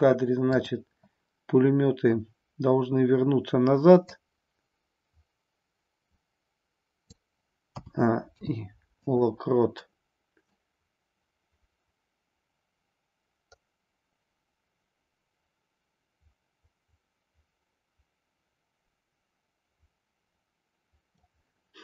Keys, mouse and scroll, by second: 0.5-3.1 drag, 4.1-7.2 drag, 7.8 a, 8.2 i, 10.5-21.3 drag.